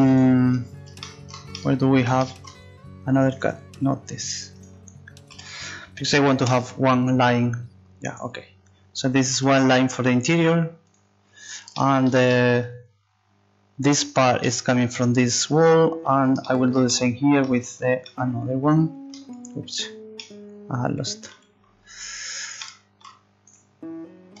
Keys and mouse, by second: 0.2 click, 3.3-4.5 right drag, 5.3 click, 5.3 a, 5.5 a, 8.1-9.8 right drag, 9.4 u, 20.3 middle click, 22.7-24.4 right drag.